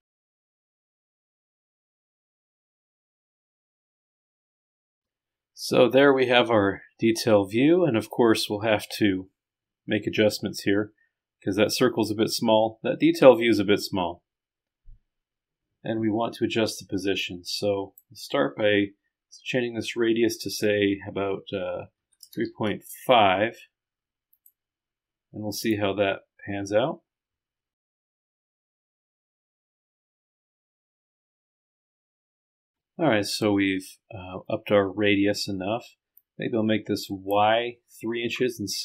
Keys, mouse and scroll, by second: 0.2 click, 1.0 scroll down 1, 3.1-3.5 scroll down 1, 3.9 scroll down 1, 4.6 scroll up 2, 5.2-5.9 scroll down 2, 5.9-6.9 scroll down 1, 6.9 scroll down 1, 8.0-8.4 scroll up 2, 17.3 click, 22.1 KP_3, 22.3 KP_Decimal, 22.7 KP_5, 26.2-27.8 drag, 29.2-30.9 drag, 36.2-37.6 drag.